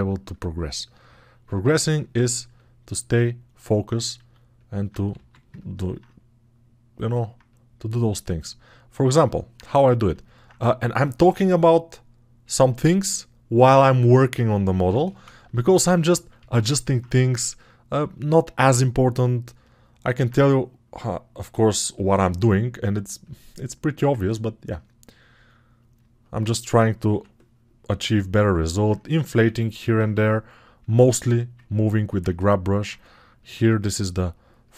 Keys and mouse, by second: 16.8 alt+q, 17.2 1, 27.0-29.3 drag, 27.0-29.3 middle drag, 27.0-29.3 right drag, 27.0 6.